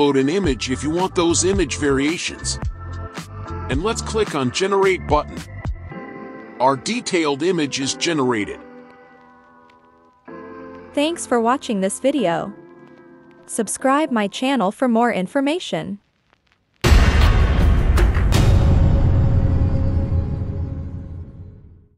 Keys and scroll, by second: 6.1 alt+a.